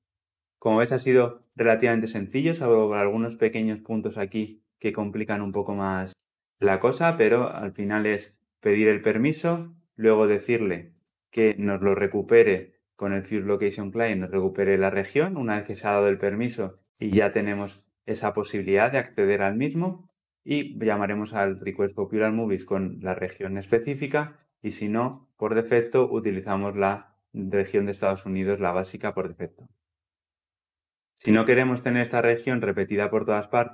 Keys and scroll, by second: 10.8 ctrl+b.